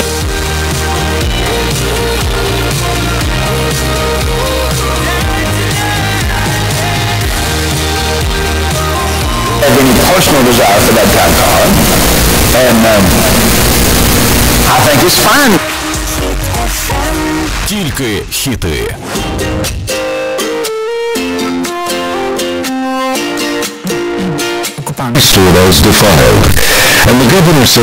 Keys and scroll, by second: 0.8 Page_Down, 15.6 Page_Down.